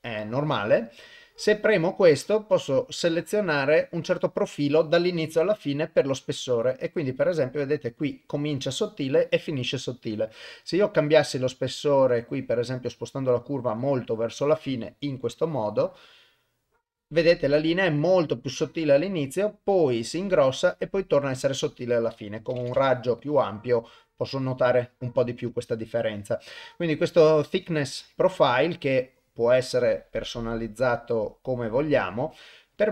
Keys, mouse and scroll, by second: 1.1 click, 2.5-4.6 drag, 5.2-7.0 drag, 9.7-14.4 drag, 15.2-16.6 drag, 22.1 click, 23.2 click, 25.4 click, 26.5-32.9 drag.